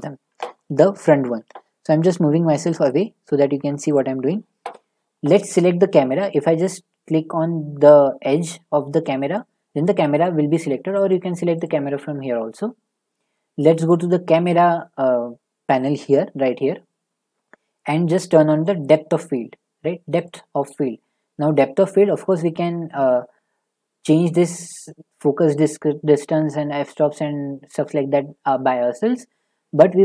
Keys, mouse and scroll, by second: 2.9 click, 3.8 click, 3.9 click, 14.0 click, 20.2 click.